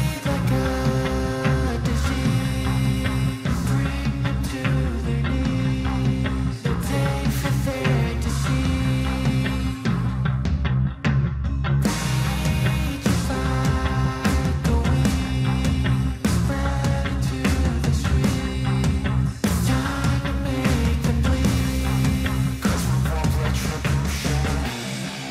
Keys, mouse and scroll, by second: 9.6 c, 10.5 click, 16.3 click, 17.0-23.5 drag, 23.5 ctrl+d.